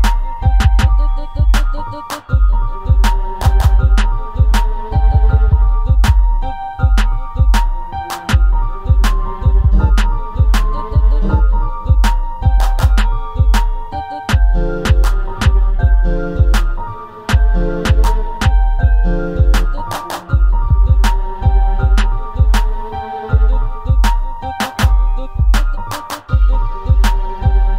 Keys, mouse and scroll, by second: 1.9-5.1 drag, 5.7 ctrl+z, 7.0 click, 7.8-12.8 right drag, 12.8-15.1 drag, 15.1 alt+a, 16.9 click, 18.3 click, 19.4-21.0 drag, 21.4 click, 22.0 click, 23.1 click, 23.9-27.7 drag.